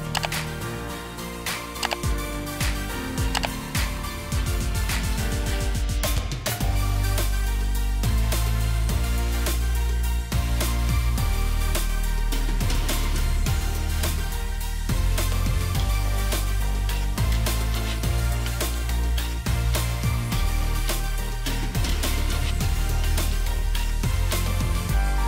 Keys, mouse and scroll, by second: 1.1 alt+scroll down 1, 2.0-2.3 alt+scroll up 1, 3.8-4.6 alt+scroll down 1, 4.6 double click, 10.5 shift+click, 12.0 double click, 12.7 ctrl+g, 14.7 shift+click, 15.7 shift+click, 16.8 double click, 18.6 shift+click, 20.1 shift+click, 20.8 shift+click, 23.0 ctrl+v, 25.1-25.2 alt+scroll down 1.